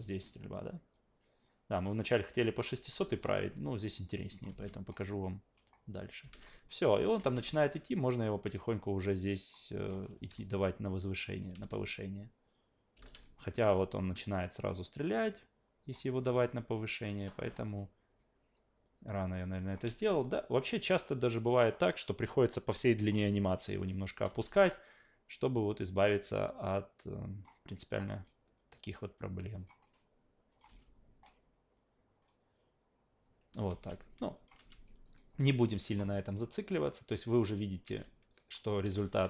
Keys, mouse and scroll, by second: 0.9 click, 2.9 s, 4.3 click, 6.2 alt+v, 6.5 alt+middle click, 6.9 alt+v, 7.2 alt+v, 7.5-8.6 drag, 9.4 click, 9.9 alt+middle click, 10.1 a, 11.3 click, 11.5 alt+v, 12.9 alt+v, 13.7-15.9 drag, 19.1 click, 19.9 ctrl+z, 20.3 click, 23.0 click, 23.2 alt+v, 24.3 alt+v, 24.9-27.4 drag, 28.6 click, 30.5 click, 30.7 alt+v, 33.7 alt+v, 34.3 click, 35.0 alt+right drag, 35.3 alt+middle drag, 37.8 alt+v, 38.3 click, 39.0 alt+v.